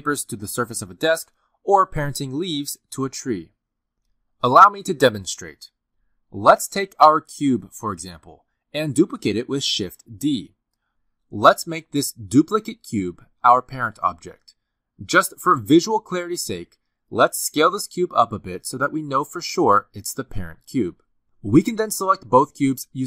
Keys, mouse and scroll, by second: 0.0-6.5 typing, 0.0 click, 0.5 click, 0.7 middle click, 0.8 shift+middle click, 0.9 scroll up 2, 0.9 shift+middle click, 1.1 click, 1.2 middle click, 1.7 click, 2.2 middle click, 2.3 shift+middle click, 2.4 click, 2.4 shift+click, 2.9 click, 3.5 click, 4.0 click, 4.4 click, 4.6 click, 5.6 click, 5.7 shift+click, 6.3 shift+click, 9.5 click, 10.6 shift+d, 13.2 click, 18.8 s.